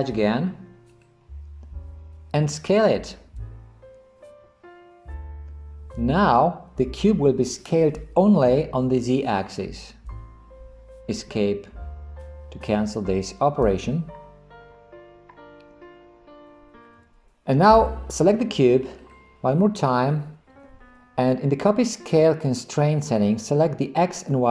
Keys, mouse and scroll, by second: 1.0 click, 3.4 s.